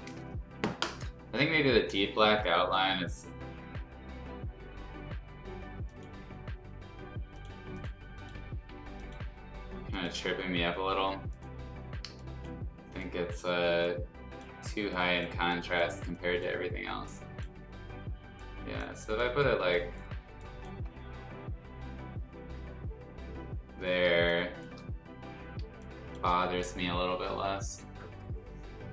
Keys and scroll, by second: 24.2 space, 25.7 space.